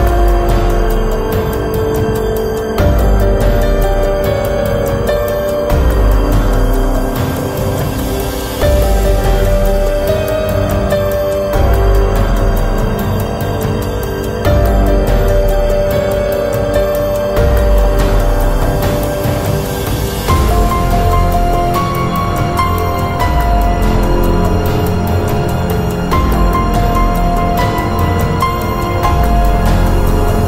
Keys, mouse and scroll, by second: 4.7-6.2 drag, 5.1-6.2 right drag, 6.2 b, 6.5 click, 8.4-9.7 drag, 15.8 ctrl+alt+c, 17.9 ctrl+alt+shift+c, 21.9 ctrl+alt+shift+super+c, 26.7-28.3 middle drag, 28.3 shift+s, 30.1 s.